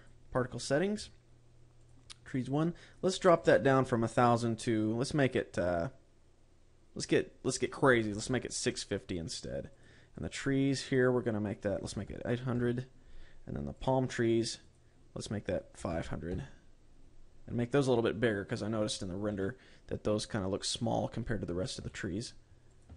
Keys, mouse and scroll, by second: 0.4 click, 1.0-1.9 scroll up 7, 2.2 click, 5.3 click, 10.2 click, 10.6 click, 11.3 click, 14.2 click, 15.1 click, 18.3-19.7 scroll down 3.